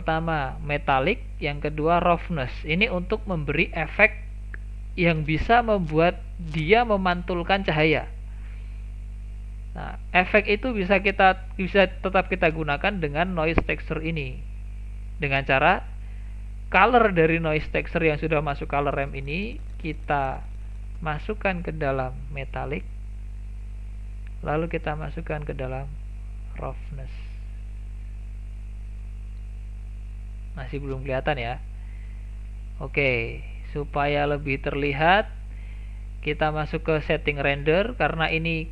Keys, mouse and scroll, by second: 10.3-13.3 drag, 20.6-23.6 drag, 24.4 click, 27.6-28.3 middle drag, 28.3-28.6 scroll up 2, 28.6-30.2 middle drag, 30.2-30.7 scroll down 1, 30.7 middle click, 31.1-31.5 scroll down 3, 31.5 middle click, 32.3-32.6 scroll down 3, 32.6-33.3 shift+middle drag, 33.3-33.6 scroll down 3, 33.6 shift+middle click, 34.0 scroll down 3, 34.3-37.2 shift+middle drag, 37.2 click.